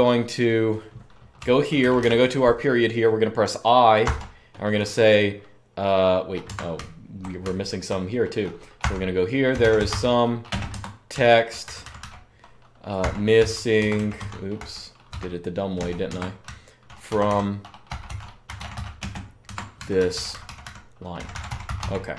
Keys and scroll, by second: 1.1-2.0 typing, 6.3 Escape, 6.5-6.9 h, 7.2 h, 7.5 h, 7.5 h, 8.6-14.2 typing, 10.5 Escape, 15.7-22.1 typing.